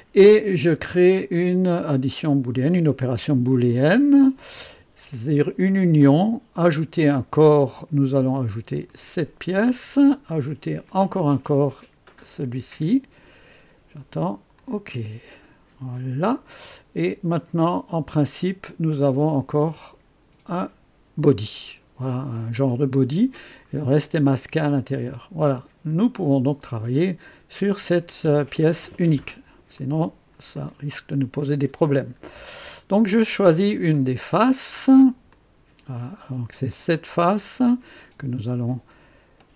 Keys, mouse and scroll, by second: 3.5 click, 6.8 click, 8.8 click, 10.8 click, 12.2 click, 14.5 click, 17.3 click, 18.9 click, 22.5 click, 24.7 click, 25.5 click, 29.8-31.2 drag, 31.4 right click, 33.2-33.8 drag, 33.9-34.7 drag, 34.8 right click, 35.3-36.1 drag, 36.7 click.